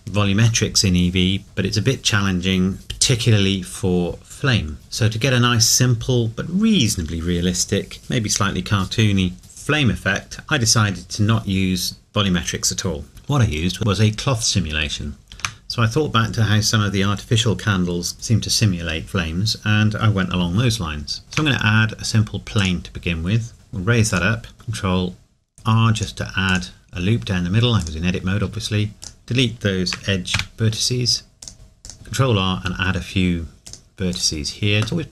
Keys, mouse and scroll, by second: 22.7 click, 23.5 g, 24.1 click, 24.5 ctrl+r, 26.0 click, 31.4 click, 31.8 click, 31.9 ctrl+r, 33.7 click.